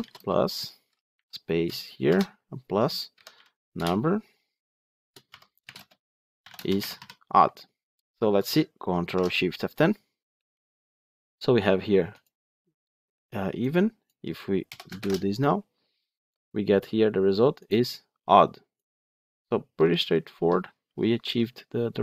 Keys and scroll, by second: 3.7 Return, 8.9 ctrl+shift+F10, 14.9 ctrl+shift+F10.